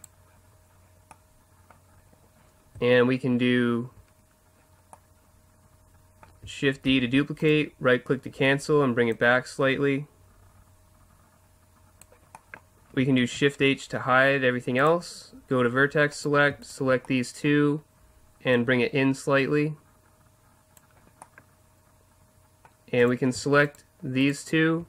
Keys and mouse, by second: 0.6-1.1 middle drag, 1.3 middle click, 1.5-5.9 middle drag, 6.9 shift+d, 7.5-10.9 drag, 12.3 middle click, 13.2 shift+h, 14.8-16.1 drag, 16.1-18.4 right drag, 18.4-20.2 middle drag, 18.5-20.3 drag, 21.2-22.5 middle drag, 23.0-24.8 right drag.